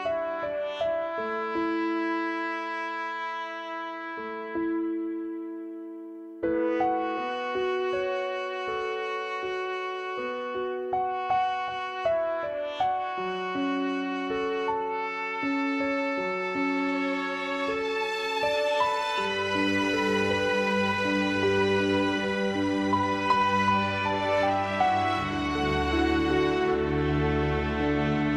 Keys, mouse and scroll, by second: 0.0 click, 0.8 g, 4.1 s, 5.4-7.7 drag, 8.7-10.3 drag, 10.5 click, 14.0 click, 14.6-15.3 drag, 15.3 Tab, 15.9 click, 17.1-20.6 drag, 21.1 click, 22.6-24.3 drag, 24.3 0, 25.6-28.3 drag.